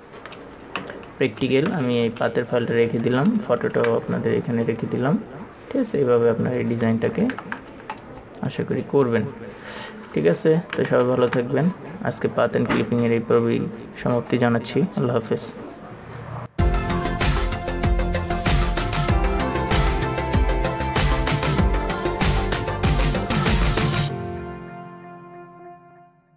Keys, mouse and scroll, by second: 0.1 click, 1.8 click, 3.9 ctrl+s, 4.5-4.8 scroll up 1, 4.8 scroll down 1, 5.0 scroll up 1, 5.3-6.8 scroll down 1, 6.8 click, 7.6 KP_2, 8.2-9.9 drag, 10.4 ctrl+a, 11.1 click, 11.4 ctrl+s, 11.8-12.1 scroll down 1, 12.1-12.5 scroll up 1, 12.5 scroll down 1, 13.5 scroll up 1, 14.0 scroll down 1.